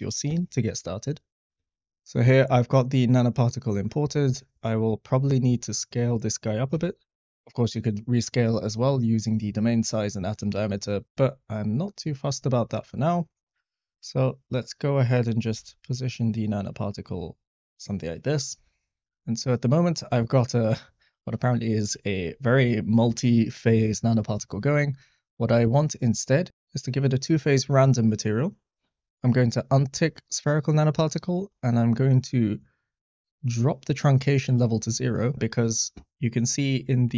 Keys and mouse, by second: 5.5 x, 6.7 s, 10.8 middle click, 12.2 click, 15.5 g, 15.6 z, 18.4 click, 20.4 middle click, 21.5-21.9 shift+middle drag, 22.2 click, 26.1 click, 27.3 click, 30.0 click, 34.6 click.